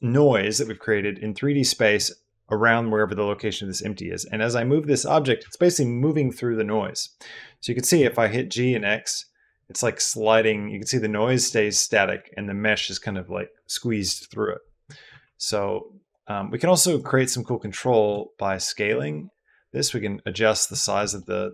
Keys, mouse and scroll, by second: 7.8 g, 8.5 x, 14.9 Escape, 15.8 click, 17.0 middle click, 17.9 s, 20.6 Escape, 21.0-21.5 middle drag.